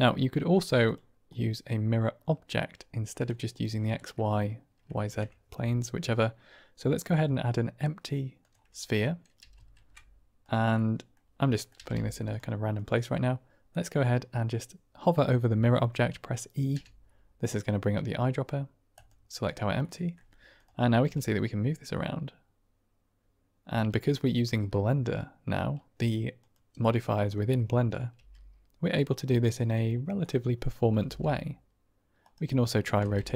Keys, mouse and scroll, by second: 3.9-4.3 drag, 4.9 shift+a, 9.3 g, 9.7 shift+z, 10.3 click, 10.7 middle click, 11.4 middle drag, 11.7 g, 11.9 z, 12.2 click, 16.6 e, 19.8-20.1 drag, 20.1-21.0 typing, 20.5 click, 27.3 middle click, 28.2 g, 29.4 typing, 30.1 click, 30.9 r, 31.2 r, 32.4-32.8 drag, 32.7-33.2 typing.